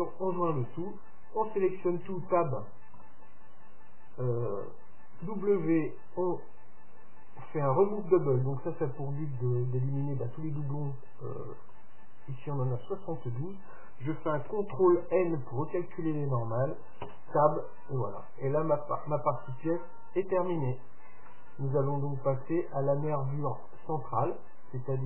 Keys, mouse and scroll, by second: 0.1-2.0 middle drag, 2.1 Tab, 2.9 a, 3.2 a, 5.3 w, 15.2 ctrl+n, 17.2 Tab, 17.7-19.5 middle drag, 21.1-23.3 middle drag, 23.5-25.0 middle drag.